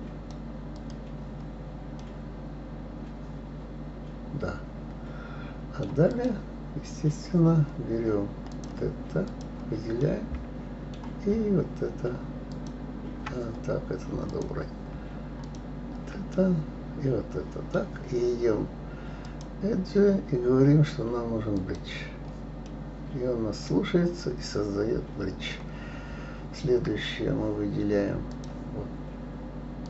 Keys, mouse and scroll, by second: 2.0-5.0 middle drag, 6.1 click, 8.5 click, 9.2 click, 10.0-12.5 middle drag, 12.5 shift+click, 14.3 click, 15.4 shift+click, 16.0-19.2 middle drag, 19.2-22.3 drag, 22.7-25.7 middle drag, 25.9-26.5 scroll up 2, 28.3 click.